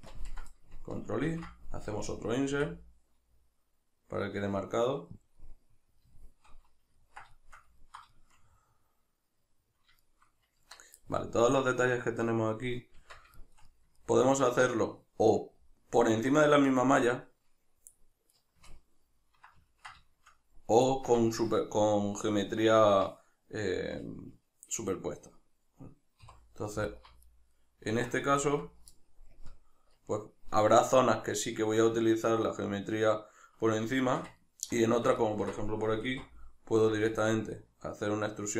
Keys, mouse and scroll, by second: 1.3 ctrl+i, 5.3 click, 5.4-10.6 middle drag, 10.6 Tab, 13.4 shift+middle click, 18.7 ctrl+middle click, 20.1-26.9 shift+middle drag, 26.2 3, 26.9 alt+right click, 27.6-28.4 middle drag, 28.4 alt+right click, 29.4 ctrl+KP_Add, 34.1-36.1 shift+middle drag, 36.1 alt+e.